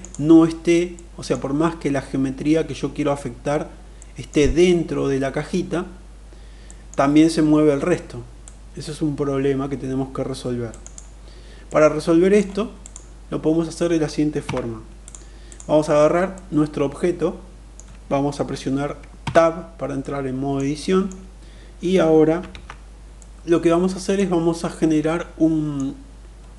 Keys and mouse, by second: 0.5 middle click, 3.5 middle click, 6.2 middle click, 8.0-10.4 drag, 10.3 right click, 11.2 middle click, 12.3 click, 13.9 Tab, 14.4 click, 15.9-17.3 middle drag, 18.6 Tab, 19.5-20.6 middle drag, 22.0 alt+z, 22.7-23.7 middle drag, 24.0-25.3 middle drag, 26.3-26.5 middle drag.